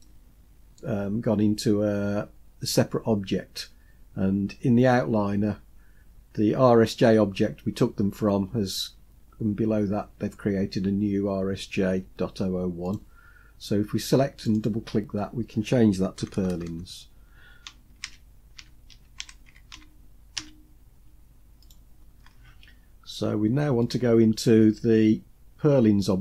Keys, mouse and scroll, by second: 0.0-0.8 middle drag, 12.8 click, 14.4 click, 14.6-21.7 drag, 16.3 BackSpace, 16.5 BackSpace, 23.8 click.